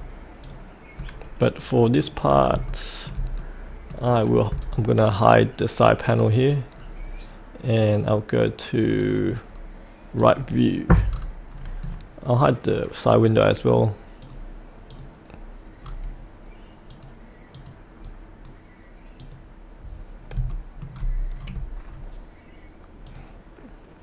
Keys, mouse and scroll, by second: 1.0 scroll down 1, 1.4 middle click, 2.2-2.5 scroll up 1, 2.7 shift+middle click, 3.4 middle click, 4.6 click, 5.0-6.1 right drag, 6.2 click, 6.7-9.0 scroll down 1, 9.0 click, 9.5-10.2 scroll down 1, 10.2 click, 11.1-11.8 scroll down 1, 12.4 click, 12.8-14.2 right drag, 14.2 click, 15.3 click, 15.8-16.9 scroll up 1, 16.9 click, 18.1 right click, 19.2 click, 20.2 scroll down 1, 20.5 shift+middle click, 21.1-23.1 scroll down 1, 23.1-24.0 drag.